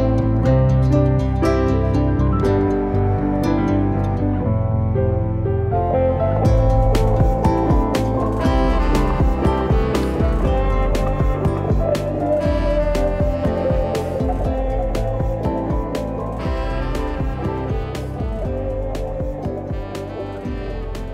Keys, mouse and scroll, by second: 0.1-1.1 drag, 1.1-1.8 scroll up 9, 1.9 click, 3.7 click, 4.3-5.8 right drag, 6.6 click, 7.3 Tab, 7.5-8.3 scroll down 1, 8.3 click, 8.7 a, 9.9-10.9 drag, 10.9 ctrl+a, 15.3 ctrl+a, 18.6 ctrl+a, 20.5-21.1 scroll up 4.